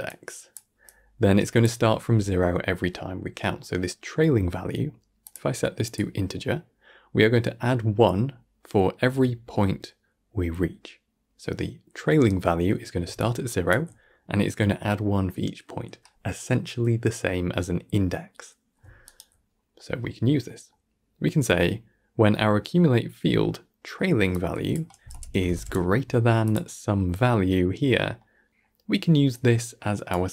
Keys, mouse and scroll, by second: 0.2 click, 1.0 click, 3.5-5.3 middle drag, 5.3-8.5 drag, 13.1 d, 13.3 click, 13.8 d, 13.9 d, 18.9 d, 19.2 right drag, 19.4 d, 19.6 scroll down 3, 19.9 middle click, 20.4 scroll down 1, 20.6-23.6 middle drag, 24.4 click, 28.3-29.4 middle drag, 29.4 click.